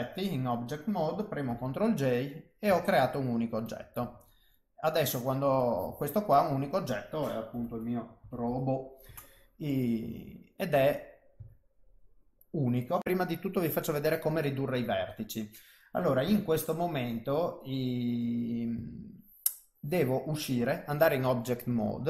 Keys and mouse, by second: 0.1 middle click, 1.8 ctrl+j, 2.1 middle click, 3.2 Tab, 3.2 middle click, 3.7 click, 4.4 Tab, 4.6 middle click, 5.6 click, 6.4 click, 6.5 click, 10.4 middle click, 11.0 middle click, 11.9 Tab, 12.0 middle click, 14.3 middle click, 16.7 Tab, 17.4 middle click, 19.1 Tab, 20.3 middle click.